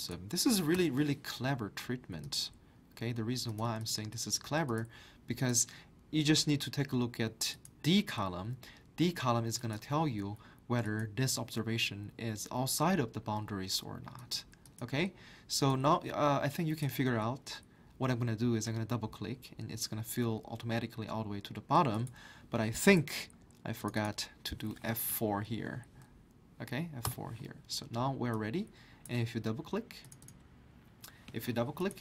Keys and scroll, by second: 0.7 Return, 25.4 F4, 27.0 Return.